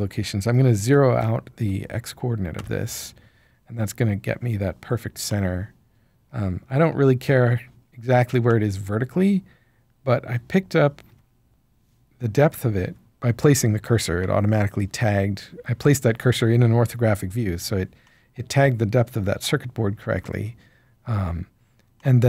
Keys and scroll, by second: 1.5 0, 2.5 Return.